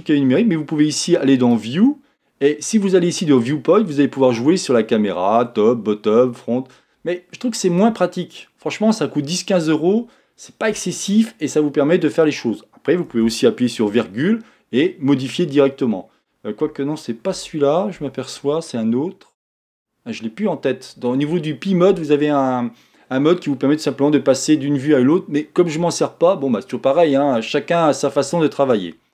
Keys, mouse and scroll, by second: 1.5-4.5 drag, 13.8 ,.